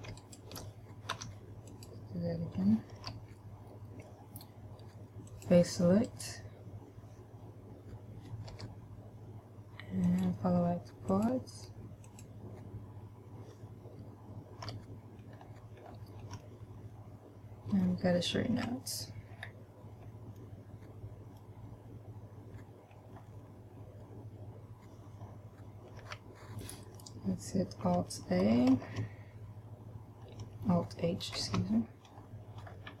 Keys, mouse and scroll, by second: 0.4 alt+right click, 1.4 w, 3.4 a, 5.5 click, 6.4 right click, 8.8 u, 15.0 a, 15.6-16.2 scroll down 2, 16.2-18.2 scroll down 2, 16.7 shift+middle click, 18.9 a, 19.8-20.7 scroll down 1, 20.7 middle click, 23.4-24.1 scroll down 1, 26.4 a, 29.1 alt+a, 31.7 alt+h, 32.4-33.0 scroll down 2.